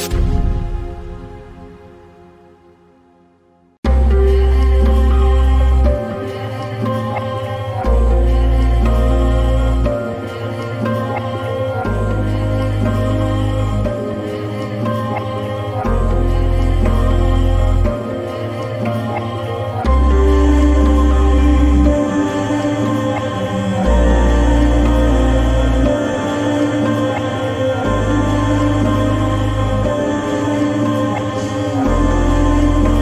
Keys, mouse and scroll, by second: 0.0 click, 2.8 click, 6.0-9.7 drag, 10.9 click, 11.8 right click, 14.7 click, 16.3 Up, 19.5 Up, 21.1 ctrl+t, 22.5-27.8 shift+drag, 27.8-33.0 shift+drag.